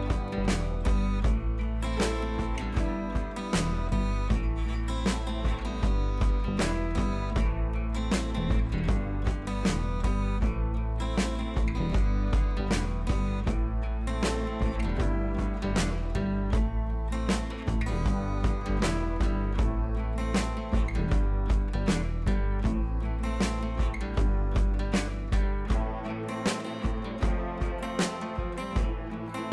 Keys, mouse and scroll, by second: 0.7 ctrl+p, 3.0 click, 4.0 ctrl+[, 4.9 shift+click, 5.2 right click, 5.7 click, 7.6 Left, 7.9 click, 8.0-8.4 Left, 8.6 Down, 8.8-9.2 drag, 16.3 click, 18.2-19.9 drag, 27.5 alt+scroll down 1, 28.8 alt+scroll up 1, 29.2 click.